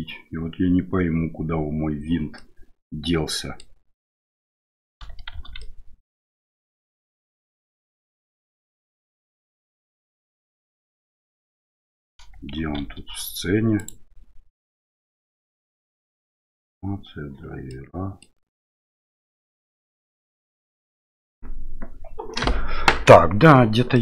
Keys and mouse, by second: 2.4-3.6 middle drag, 5.3 shift+z, 5.6 middle click, 6.8-8.8 middle drag, 10.7 shift+middle click, 12.6 shift+z, 13.8 click, 17.7 middle click, 23.9 middle click.